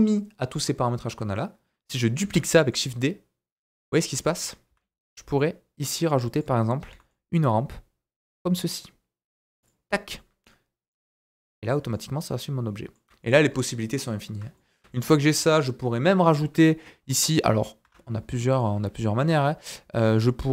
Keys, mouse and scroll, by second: 2.2 shift+d, 3.7-13.4 right drag, 3.9 scroll down 1, 4.2 shift+middle click, 4.7 s, 6.9 g, 10.1-10.4 scroll down 1, 10.4 middle click, 11.0 Tab, 11.1 scroll down 1, 11.3 middle click, 13.2 click, 14.5 shift+middle click, 15.3 KP_1, 16.3 scroll up 2, 16.6 shift+middle click, 17.0 scroll up 2, 17.3-20.5 right drag, 17.3 middle click, 17.8 Tab, 18.1 scroll down 1, 18.4 middle click, 18.6-19.3 scroll up 2, 19.3 KP_1.